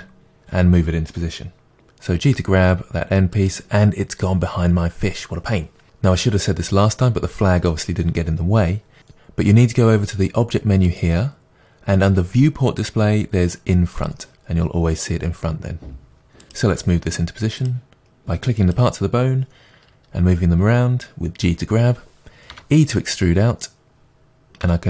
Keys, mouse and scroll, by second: 2.1 g, 3.5-5.9 drag, 10.9 click, 13.9 click, 16.4 click, 16.7 g, 17.7 click, 18.0 g, 18.7 click, 22.5 e.